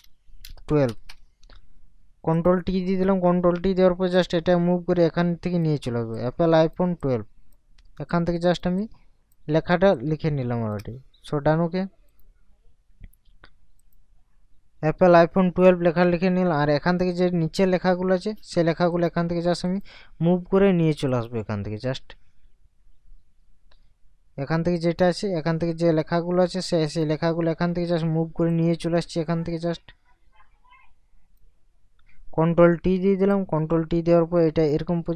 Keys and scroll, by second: 0.0 space, 0.9 1, 1.1 2, 3.2 ctrl+t, 32.7 ctrl+t.